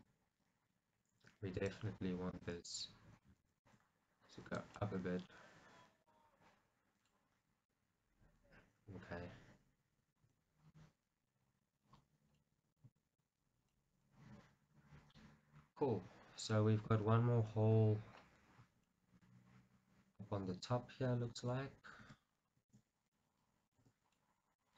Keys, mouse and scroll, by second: 0.1-2.9 alt+drag, 2.9 middle click, 3.4 g, 4.6 click, 4.9 middle click, 10.3 Tab, 10.5 scroll down 1, 10.7 middle click, 11.5-16.9 middle drag, 11.5 scroll down 1, 17.7 KP_1, 18.4 scroll up 1, 19.0 shift+middle click, 22.5 scroll down 1, 22.7 shift+z, 23.2 middle click, 23.9 Tab, 24.2 middle click.